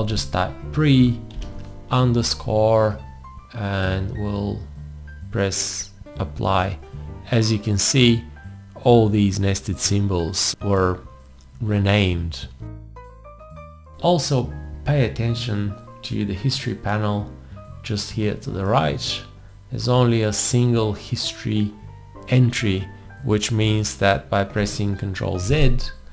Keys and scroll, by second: 0.0-1.3 typing, 25.5 ctrl+z.